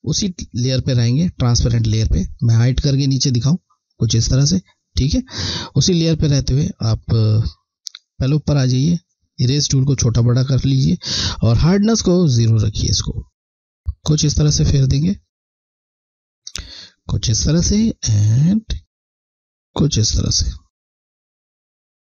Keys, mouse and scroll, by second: 2.7 click, 8.8 click, 8.9 click, 12.2 click, 21.9 click.